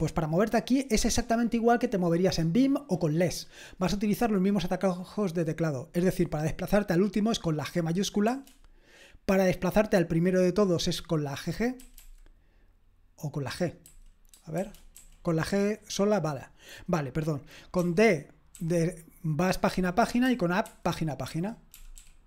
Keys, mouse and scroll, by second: 8.3 shift+g, 11.8 typing, 13.8-15.0 typing, 17.8-18.5 typing, 19.7-22.2 typing.